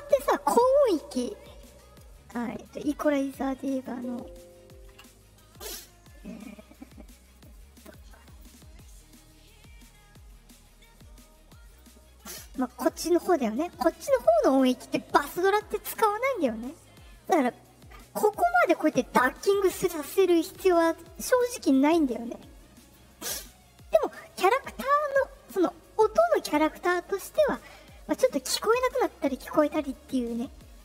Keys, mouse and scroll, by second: 3.7 click, 7.3 click, 8.2 click, 11.6 click, 18.3-21.3 drag, 21.8 right click, 22.7 click, 23.8-30.7 drag.